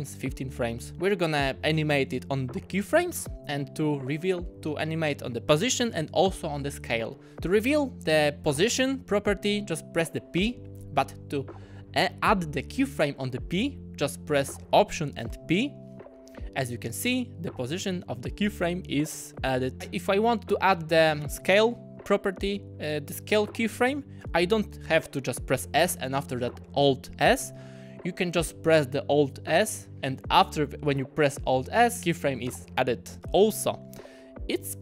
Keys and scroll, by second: 8.5 p, 15.3 alt+p, 32.0 alt+s.